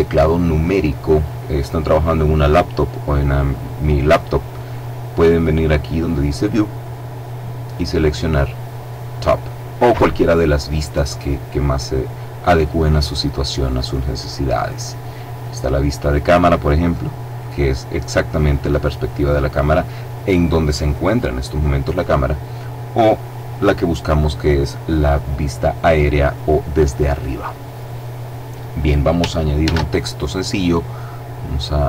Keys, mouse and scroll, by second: 6.2 click, 16.5 click, 19.0 click, 23.2 click, 29.5 shift+a, 31.7 click.